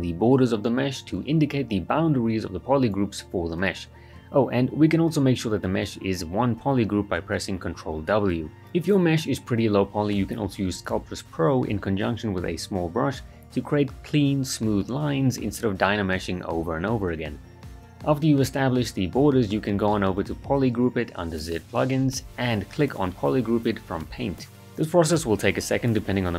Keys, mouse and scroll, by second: 1.1 s, 1.2-1.8 click, 1.8 alt+right click, 3.2-4.7 drag, 5.3 shift+f, 6.2 ctrl+w, 9.7 click, 10.3 ctrl+right click, 11.1-13.6 drag, 13.8 shift+f, 14.2 right click, 14.3-15.1 right click, 15.2 ctrl+z, 15.6 click, 16.8 shift+f, 17.1 right click, 17.5 alt+right click, 18.8 ctrl+w, 19.2 alt+right click, 19.7 alt+right click, 20.9 click, 24.1-26.1 right drag, 26.2-26.3 ctrl+shift+click.